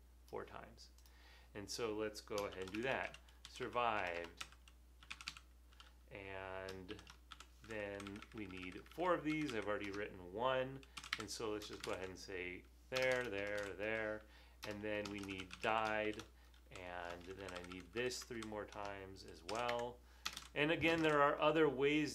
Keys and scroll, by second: 2.4-5.8 typing, 6.9-7.6 typing, 7.9 shift+Left, 8.1 shift+Left, 8.3 shift+Left, 8.4 shift+Left, 8.5 shift+Left, 8.6 shift+Left, 8.8 shift+Left, 8.9 shift+Left, 9.1 shift+Left, 9.3 shift+Left, 9.5 shift+Left, 11.2 super+c, 11.3 Right, 12.0 super+v, 14.1 super+v, 15.1-16.7 typing, 17.4 shift+Left, 17.6 shift+Left, 17.8 shift+Left, 17.9 shift+Left, 18.2 shift+Left, 18.6 typing, 19.7 super+c, 20.4 Right, 20.9 super+v.